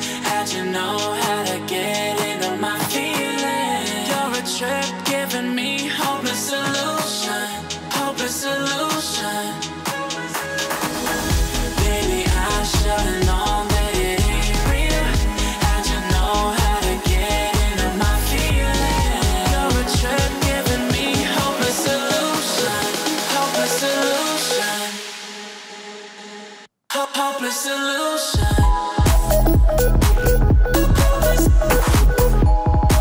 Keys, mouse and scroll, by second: 1.8 click, 4.4 click, 7.7 alt+scroll up 1, 8.2 alt+scroll down 1, 8.6 click, 9.8 F7, 10.4-11.0 alt+scroll down 1, 12.7 alt+scroll up 1, 13.1 click, 15.1-17.2 drag, 19.7 ctrl+shift+], 21.7 alt+scroll up 1, 22.3-27.8 drag.